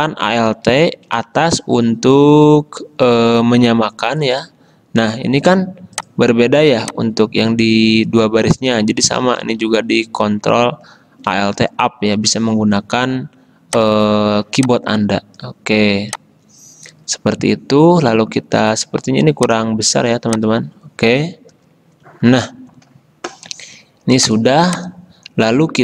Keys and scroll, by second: 0.4 alt+Up, 4.3 alt+Down, 9.1 alt+Up, 21.6 alt+Down.